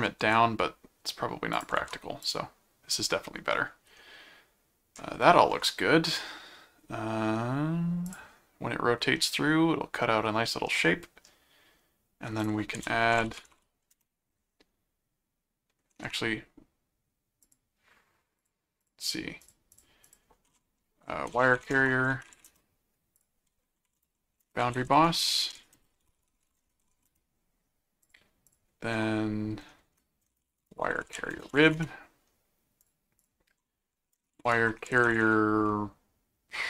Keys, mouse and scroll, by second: 0.2 ctrl+alt+d, 1.5 alt+click, 1.8 alt+c, 2.2 click, 8.0 click, 9.2-10.2 middle drag, 10.7 middle click, 12.4 click, 12.5-14.0 typing, 17.4 click, 18.4-20.6 drag, 21.1-22.8 typing, 23.1 click, 24.0-27.3 typing, 28.0 click, 30.1-32.1 typing, 32.8 click, 34.0-35.6 typing.